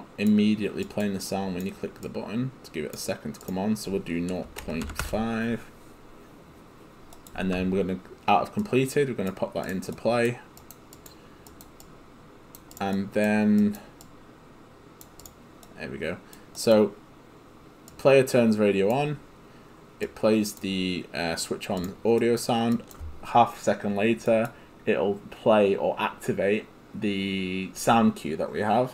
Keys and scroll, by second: 4.2-5.4 typing.